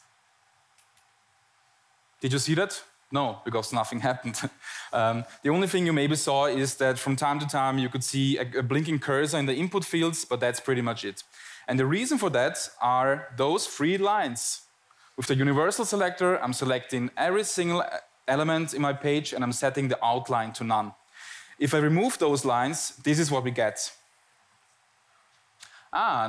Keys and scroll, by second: 0.1 Tab, 0.8 Tab, 1.6 Tab, 3.4 Tab, 4.4 Tab, 5.4 Tab, 6.6 Tab, 7.7 Tab, 9.0 Tab, 10.2 Tab, 10.9 Tab, 11.7 Tab, 24.3 Tab, 25.1 Tab, 25.7 Tab.